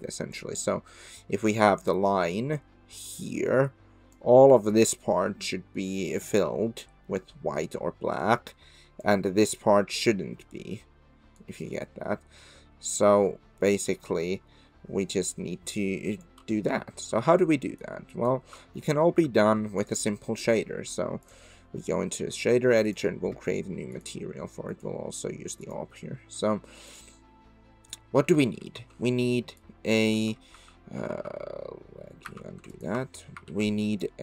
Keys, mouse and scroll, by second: 0.3-4.6 d, 9.0-11.3 d, 10.3 click, 14.7 click, 16.3 d, 17.8 click, 18.7 shift+middle drag, 19.9-21.3 drag, 22.9 click, 23.9 click, 24.7 click, 28.6 ctrl+t, 29.6 click, 30.5 ctrl+z, 31.1 ctrl+z, 32.3 ctrl+z, 33.4 ctrl+t, 34.0 click.